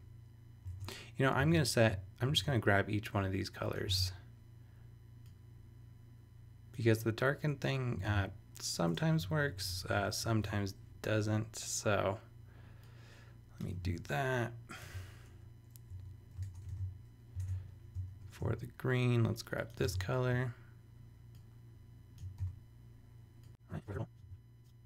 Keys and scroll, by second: 0.8 super+Tab, 1.8 shift+super+Tab, 2.3 shift+super+e, 4.0 super+Tab, 8.0 super+v, 9.1 super+Left, 10.2 shift+Left, 10.4 shift+3, 13.7 super+c, 15.9 super+Return, 16.4 super+Tab, 16.7 super+v, 17.4 super+Tab, 17.9 shift+super+Tab, 18.1 shift+super+e, 19.8 super+Tab, 22.4 super+v, 23.6 super+c, 23.8 super+Return, 24.2 super+[, 24.8 super+Tab.